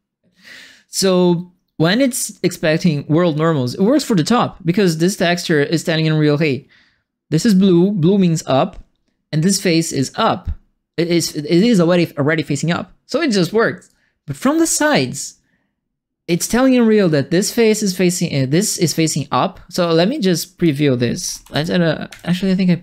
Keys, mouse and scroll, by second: 0.5 click, 11.2 click, 13.8-15.1 drag, 19.8 click, 20.9-21.9 typing, 22.0 Escape.